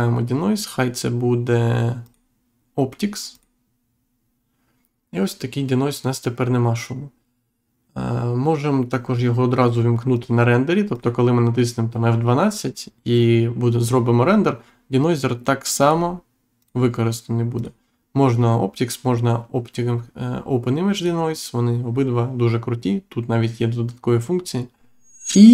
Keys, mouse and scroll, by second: 2.0 click, 3.3 click, 10.1 click, 10.9 click, 15.7 click, 16.5 click, 17.5 click, 20.9 click.